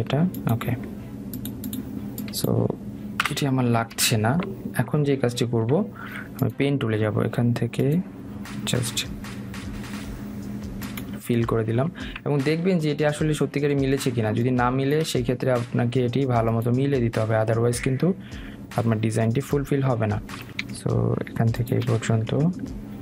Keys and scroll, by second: 3.6 Delete, 11.9 Escape, 22.8 Escape.